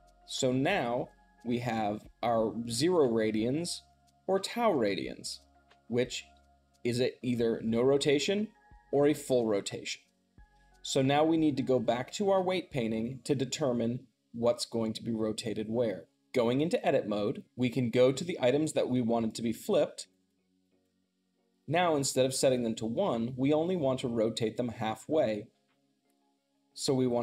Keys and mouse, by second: 16.6 Tab, 18.4-19.8 drag, 20.0-27.2 shift+drag.